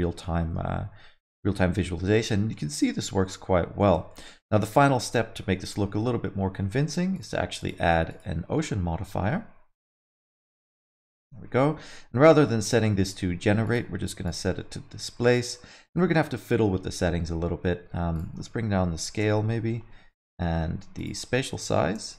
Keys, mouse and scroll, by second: 0.2 middle click, 1.5 alt+middle click, 3.8 alt+shift+z, 4.1 alt+middle click, 4.4 middle click, 5.6 space, 5.7 middle click, 7.1 click, 7.6 click, 8.1 click, 10.7 middle click, 10.9 scroll down 5, 12.4 alt+shift+z, 12.6 middle click, 13.6 click, 14.6 middle click, 14.9 scroll up 4, 15.1 alt+middle click, 15.4 middle click, 18.1 click, 21.0 click.